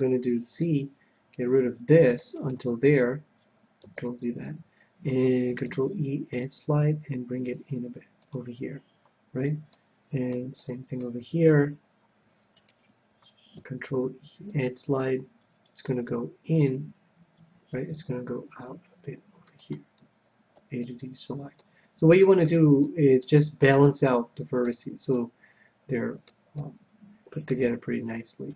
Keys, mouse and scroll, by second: 0.1 c, 2.6-4.4 right drag, 4.3 ctrl+z, 5.9 ctrl+e, 8.6-10.3 drag, 9.9-12.4 middle drag, 12.9-14.5 right drag, 14.1 ctrl+e, 14.6 right click, 19.8-21.4 drag, 20.8 a, 21.1-28.5 middle drag.